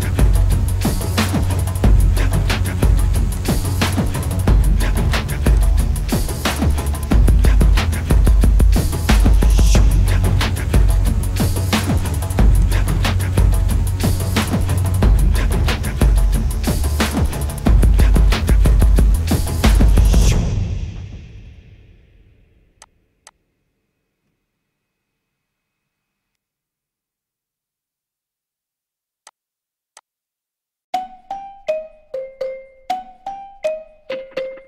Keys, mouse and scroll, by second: 0.3 right click, 3.8 alt+scroll up 1, 10.1 alt+scroll down 1, 10.9 alt+scroll up 1, 12.6 double click, 14.7 alt+scroll down 1, 15.7 scroll down 1, 21.0 alt+scroll up 1, 23.2 double click, 26.4 alt+scroll down 1, 31.9 alt+scroll up 1.